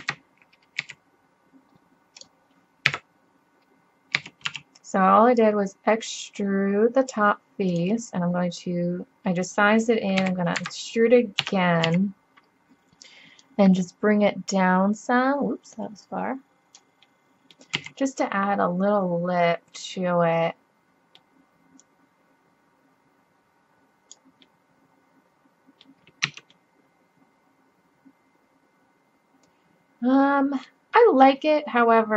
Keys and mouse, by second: 0.8 s, 2.9 KP_7, 4.2 s, 10.2 e, 11.4 KP_3, 11.9 z, 12.1 middle click, 13.4 click, 17.1-19.6 drag, 17.8 z, 20.1-21.1 middle drag, 21.8-23.6 drag, 23.8 middle click, 25.4 middle click, 26.3 Tab, 31.8-32.1 middle drag.